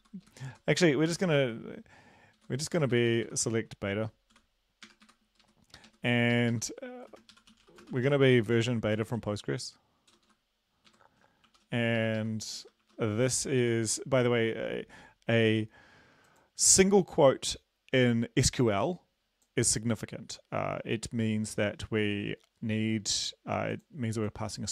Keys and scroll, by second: 0.1 Left, 0.3 Left, 0.5 Right, 1.1 typing, 2.4 Right, 2.8 Delete, 3.0 Delete, 3.1 Delete, 3.3 Delete, 3.4 Delete, 5.1 Delete, 5.4 Right, 5.9 Right, 6.4 Left, 6.6 Left, 6.7 Left, 7.1-8.4 typing, 9.0 ctrl+s, 10.3 Left, 10.9 Right, 11.6 typing, 11.8 ctrl+Left, 12.0 ctrl+Left, 12.2 ctrl+Left, 12.9 (, 13.2 Right, 13.8 ctrl+s.